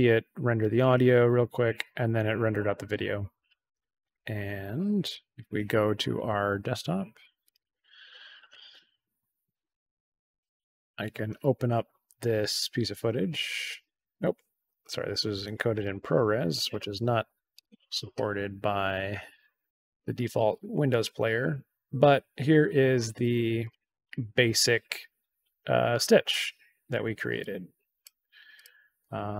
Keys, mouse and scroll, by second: 5.0 click, 7.4 click, 7.5 click, 8.3 click, 8.4 click, 10.4 click, 10.5 click, 15.8 click, 17.5 right click, 23.6 click, 27.3 click, 28.5 click.